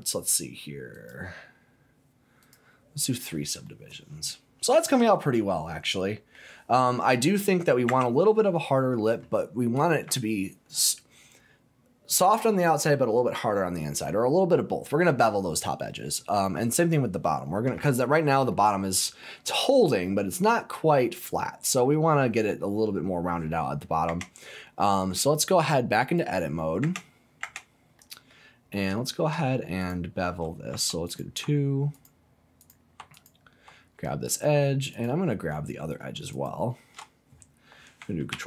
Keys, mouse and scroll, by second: 0.9 click, 2.4 click, 3.6-6.3 middle drag, 6.6 scroll up 1, 7.9 Tab, 8.4-9.6 scroll up 1, 17.7 scroll up 1, 17.9 middle click, 18.1-18.5 scroll down 1, 18.5 middle click, 19.8 scroll up 1, 20.0-21.9 middle drag, 21.9 scroll down 1, 22.7 middle click, 24.0 Tab, 24.5 scroll down 1, 24.7 middle click, 26.1 click, 26.5 middle click, 27.4 Tab, 27.9 middle click, 28.5-28.8 scroll up 1, 28.9 shift+middle click, 29.8 click, 30.7 2, 31.0 click, 31.9 click, 32.6 click, 33.1 alt+click, 34.9 alt+click, 36.3 alt+shift+click, 38.3 ctrl+b.